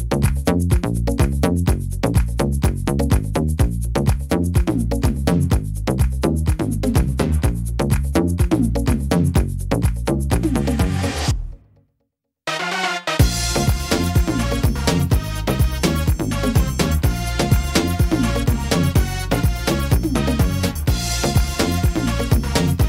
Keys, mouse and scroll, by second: 1.0 click, 1.8 click, 5.6 middle click, 5.9-6.6 scroll down 5, 6.6 shift+middle click, 6.9 scroll up 3, 7.3 middle click, 7.6 scroll down 2, 8.1 middle click, 8.5 scroll down 2, 8.9 middle click, 9.4 shift+middle click, 9.8 scroll up 3, 10.4 shift+middle click, 11.0 scroll up 1, 11.5 middle click, 12.0-12.4 scroll down 4, 12.4 middle click, 12.9 scroll down 1, 13.3 middle click, 15.0 c, 19.6 click, 20.5 click.